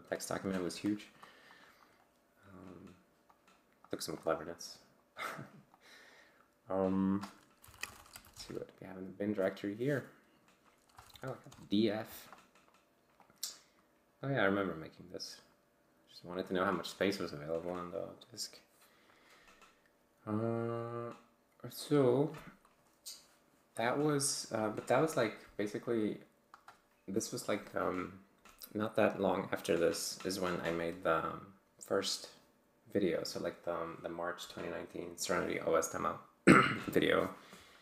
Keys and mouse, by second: 1.5 click, 3.3-4.0 drag, 4.1 click, 5.4 click, 5.8 click, 7.4-8.8 typing, 10.7-11.6 typing, 13.2 click, 14.3 click.